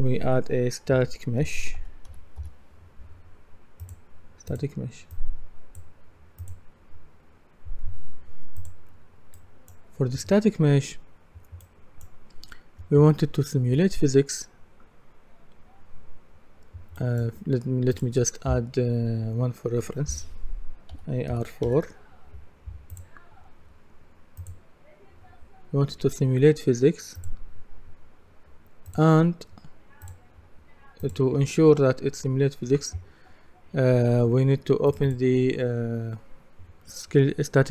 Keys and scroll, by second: 0.9-2.3 typing, 20.9-21.3 typing.